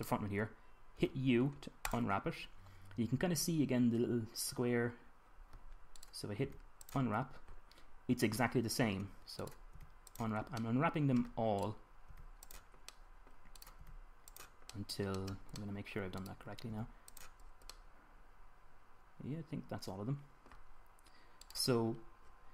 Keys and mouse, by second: 0.3-2.7 drag, 1.7 u, 6.7-9.8 middle drag, 7.2 u, 10.2-11.8 middle drag, 10.5 u, 12.8 u, 14.4-15.4 drag, 14.5 u, 16.5 middle click, 17.4 u, 18.6 middle click, 20.4-22.2 middle drag.